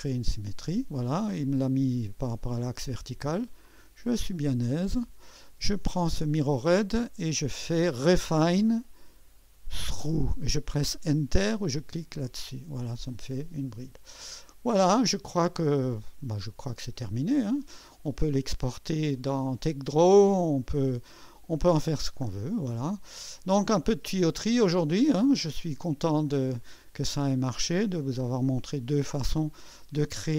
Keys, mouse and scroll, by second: 0.0 click, 3.6 click, 4.7 click, 6.2 click, 8.4 click, 8.9 click, 9.9 click, 12.2 click, 13.2-14.3 drag, 14.5-15.6 drag, 16.4 click, 17.0-18.3 drag, 19.9-21.1 drag, 23.4-24.5 drag, 23.4-24.5 middle drag.